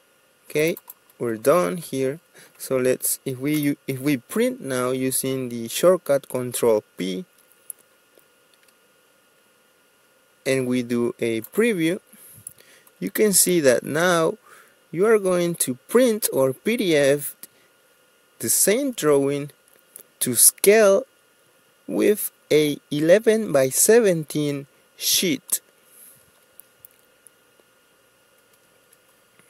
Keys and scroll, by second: 3.7 ctrl+p, 26.6 Escape, 28.6 Escape.